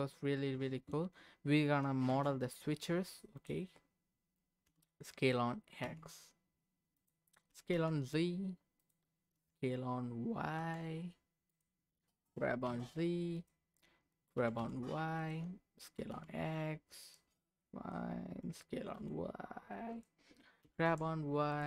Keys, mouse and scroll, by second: 2.1 shift+a, 4.0-4.7 scroll down 1, 4.7 s, 5.8 x, 7.0 click, 7.5 s, 7.7 z, 8.8 click, 9.3 s, 10.5 y, 11.5 click, 12.2 g, 12.7 z, 13.4 click, 14.4 g, 14.6 y, 15.2 click, 15.9 s, 16.1 x, 17.0 click, 17.4 scroll up 2, 17.6 middle click, 18.4 s, 19.0 y, 19.9 click, 20.6 g, 20.8 y, 21.5 click.